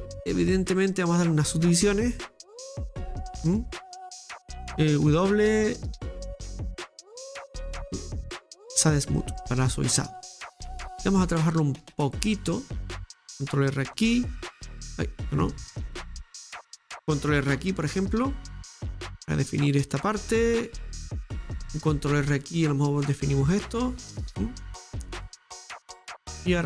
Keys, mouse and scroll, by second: 2.6-5.0 drag, 6.7-8.0 drag, 8.0 Tab, 9.2-9.7 scroll up 1, 10.2 middle click, 10.7 Tab, 11.1 middle click, 12.0-12.5 scroll up 2, 12.5-21.9 middle drag, 21.9 ctrl+r, 23.9 scroll down 2, 24.1-25.4 middle drag, 25.4-26.1 scroll up 1, 26.1-26.6 scroll down 1.